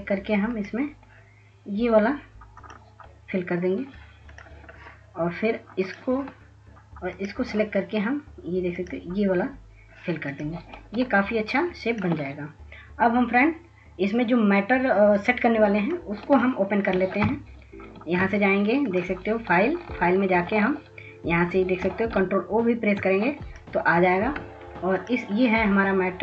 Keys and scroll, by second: 23.0 ctrl+s, 23.5 ctrl+s, 23.6 ctrl+s, 23.7 ctrl+s.